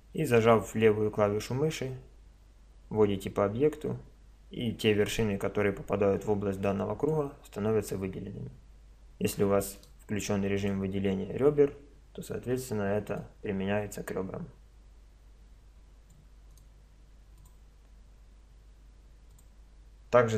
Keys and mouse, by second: 9.9 click, 10.6-11.9 middle drag, 11.7 click, 12.5 c, 16.6 click, 17.4-18.6 middle drag, 18.6-20.3 drag.